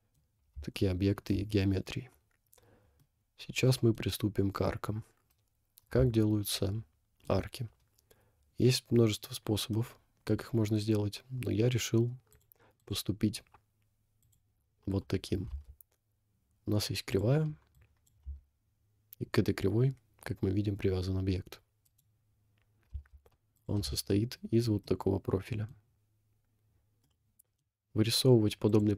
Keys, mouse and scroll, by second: 0.7 shift+middle click, 3.1-4.0 middle drag, 5.5 scroll up 1, 6.3-7.3 shift+middle drag, 9.8 middle click, 11.4-11.9 scroll up 2, 12.3 click, 12.8 click, 14.2 click, 15.7 Tab, 17.1 click, 17.7 click, 18.2 g, 23.1 Tab, 23.6 click, 24.1 shift+middle click, 24.8 middle click, 25.9 scroll up 1, 26.6 scroll down 2, 27.0-27.6 middle drag, 28.7 click.